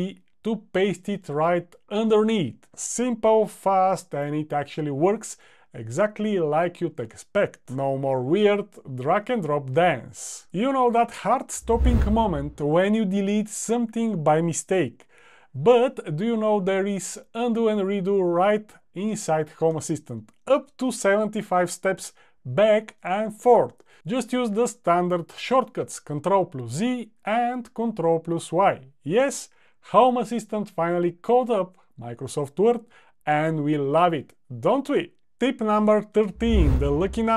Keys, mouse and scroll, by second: 30.4 super+z, 30.7 super+z, 31.2 super+z.